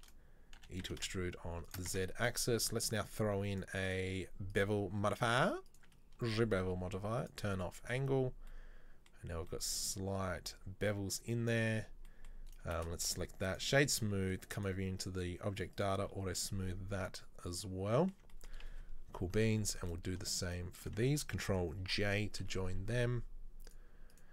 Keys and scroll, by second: 0.6 e, 2.0 Tab, 12.8 space, 21.9 ctrl+j.